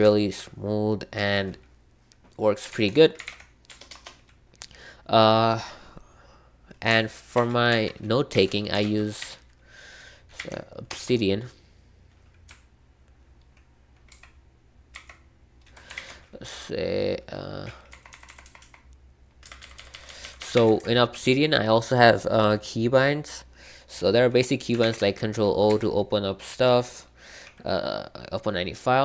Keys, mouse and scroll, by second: 0.0 super+k, 3.0-3.7 typing, 3.8 Return, 7.3 super+2, 7.6 super+3, 8.3 super+p, 8.4-10.3 typing, 10.8 Return, 14.0 ctrl+w, 14.7-15.4 typing, 15.9 ctrl+o, 17.9 Down, 18.1 Down, 18.2 Down, 18.4 Down, 18.6 Down, 19.5 Up, 19.7 Up, 19.8 Up, 20.5 Escape, 20.7 Escape, 24.8 ctrl+o, 25.6 Escape.